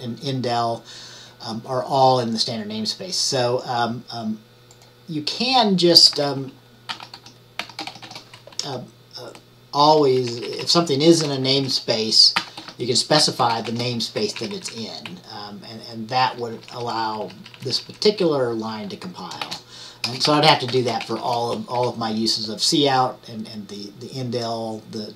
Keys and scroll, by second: 6.8-8.6 typing, 9.1 Right, 9.2-10.4 Right, 10.5 shift+Right, 10.7 shift+Right, 11.7 Left, 12.2-16.5 typing, 15.1 Right, 16.6 Right, 16.8 Right, 17.0 Right, 17.5 Right, 17.8 Right, 18.1 Right.